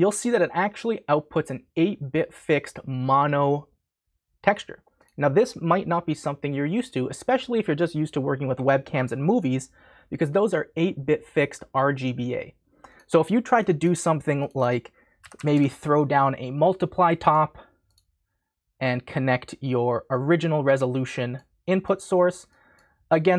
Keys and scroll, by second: 15.0-16.0 typing.